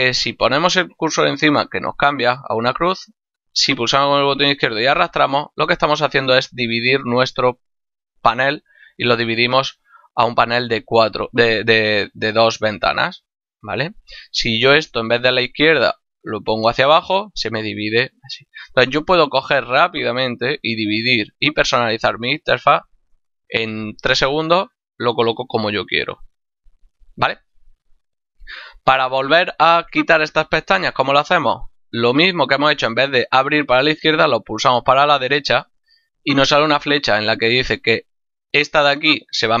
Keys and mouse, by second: 3.5 click, 14.6 click, 19.6 click, 32.2 click.